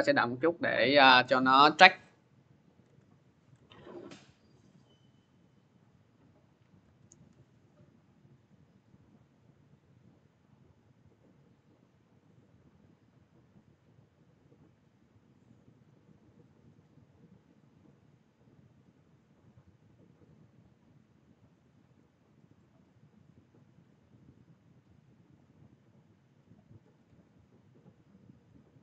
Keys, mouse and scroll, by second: 2.7 alt+Tab, 3.4 alt+Tab, 5.8 click, 6.7 alt+Tab, 9.2 click, 11.4 click, 19.5-20.1 scroll, 20.1-21.0 scroll, 21.5 click, 22.4 click, 23.6 click, 26.7-27.4 scroll, 27.9-28.7 scroll.